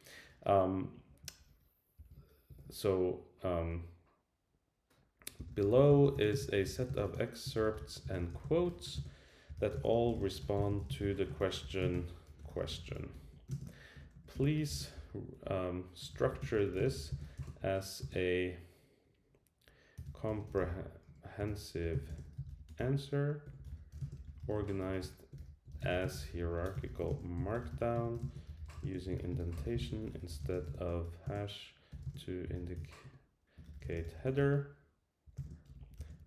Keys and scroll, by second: 33.0 Escape, 35.7 shift+Return.